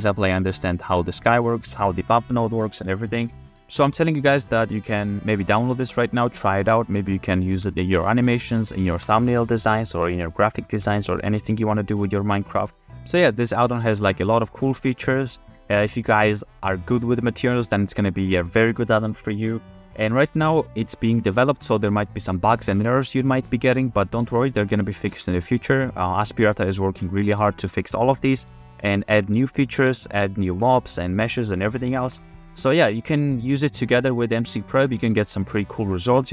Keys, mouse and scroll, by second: 3.4 shift+f, 3.9 shift+f, 13.0 f, 25.2 f, 26.3-26.8 shift+middle drag, 27.5 shift+click, 28.5 shift+f, 32.1 shift+f.